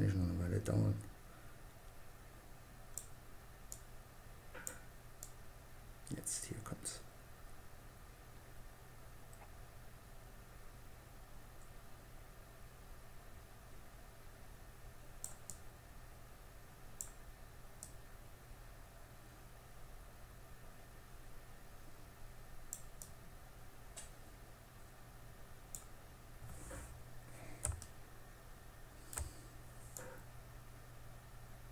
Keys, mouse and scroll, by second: 3.0-6.2 drag, 14.9-16.7 drag, 17.1-18.9 drag, 22.3-24.1 drag, 29.2-31.0 drag.